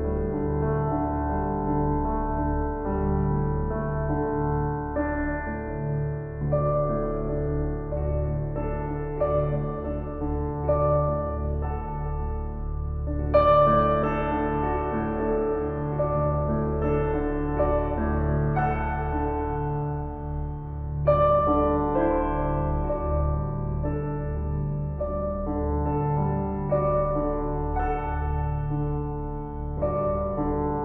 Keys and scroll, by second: 14.4 ctrl+t, 27.9 ctrl+j.